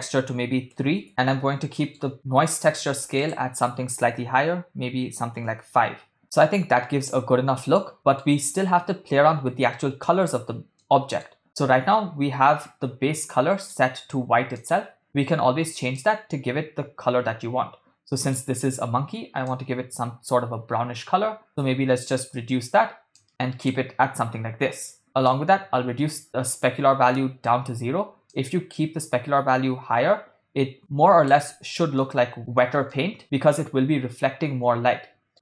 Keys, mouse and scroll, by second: 1.1 middle click, 3.2-5.6 drag, 6.2-8.4 middle drag, 10.8 middle click, 11.5-13.8 middle drag, 14.6 click, 25.3-26.7 drag, 28.3-31.7 drag, 32.1-32.6 middle drag, 33.0-35.3 middle drag.